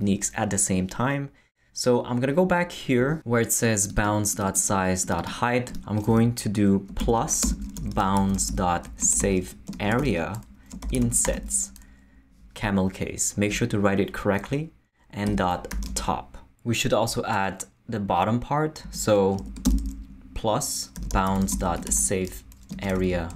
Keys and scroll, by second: 6.1-11.8 typing, 15.0-16.4 typing, 18.8 space, 19.3 shift+space, 20.7-23.3 typing.